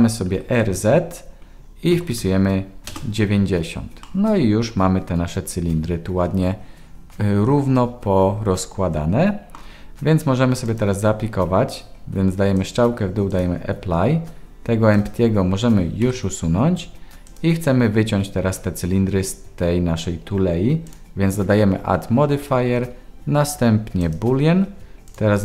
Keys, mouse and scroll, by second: 0.3 r, 4.0-9.5 middle drag, 12.6-13.4 drag, 14.9 click, 16.0 Delete, 20.9-24.1 drag.